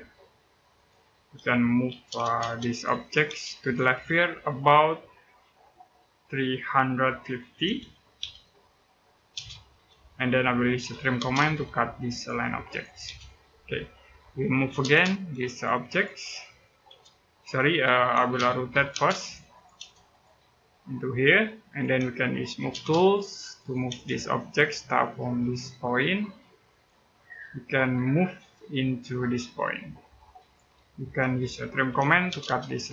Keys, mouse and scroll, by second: 0.5 click, 1.7 m, 2.2 space, 2.5 click, 3.0 space, 3.4 click, 7.1-9.1 typing, 10.3-11.2 typing, 11.9 click, 12.8 space, 13.0-13.4 scroll down 1, 13.4 middle click, 14.0-14.5 scroll up 1, 14.5 m, 14.6 space, 15.3 click, 16.7 space, 17.4 Escape, 17.9-19.5 typing, 19.0 click, 19.9 click, 22.4 m, 22.5 space, 22.9 click, 23.7 space, 23.9 scroll up 1, 26.5 click, 26.8 scroll down 1, 27.1 middle click, 29.1-29.5 scroll up 1, 30.2 click, 30.6 scroll down 1, 31.0 middle click, 31.4-32.3 typing, 32.5 click.